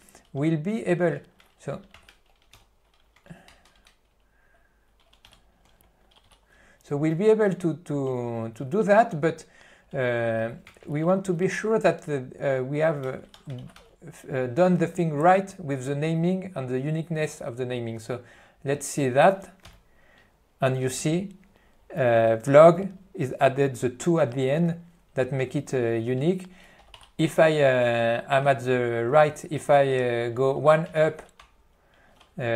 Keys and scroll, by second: 3.8 alt+s.